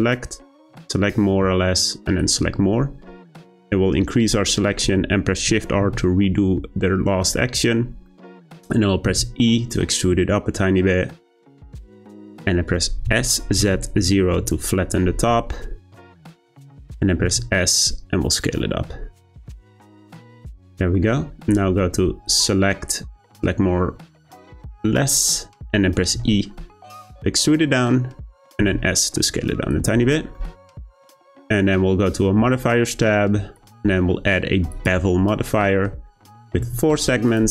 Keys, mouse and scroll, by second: 5.8 shift+r, 8.0 middle click, 9.0 e, 13.0 s, 15.5-17.2 middle drag, 17.2 s, 20.4-22.2 middle drag, 22.2-25.3 drag, 26.1 e, 28.6 s, 29.9 Tab, 30.3-31.0 middle drag, 31.0-33.5 scroll down 1, 34.8 click, 35.2-36.3 scroll up 1, 36.3-37.4 drag.